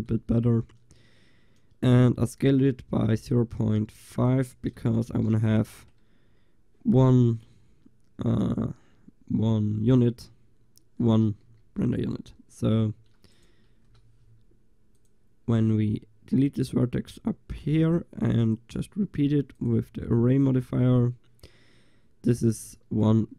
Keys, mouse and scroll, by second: 3.5 ctrl+a, 11.5 g, 12.7 Tab, 13.4-15.2 drag, 13.9 Delete, 16.7 Tab, 17.9-20.1 drag, 20.4 click, 20.4-23.3 middle drag, 20.4 right click.